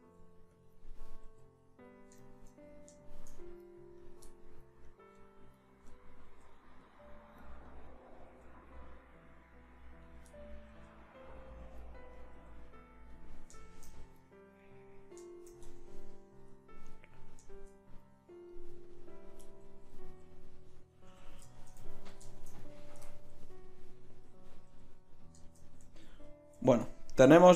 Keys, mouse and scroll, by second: 0.2 g, 1.4 g, 1.6 right click, 2.3 right click, 2.6-7.0 right drag, 6.5 g, 7.2 right click, 7.6-8.8 right drag, 8.3 g, 9.0 middle click, 9.2 middle click, 10.8 g, 12.2-14.1 drag, 12.4 g, 15.6 Tab, 18.5-19.9 drag, 21.1 KP_1, 24.7 a, 26.6 ctrl+s.